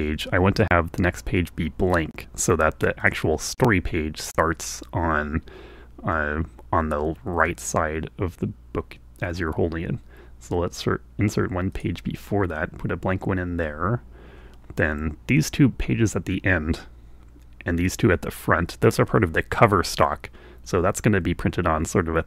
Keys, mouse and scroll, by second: 3.1 click, 7.7 click, 11.8 click.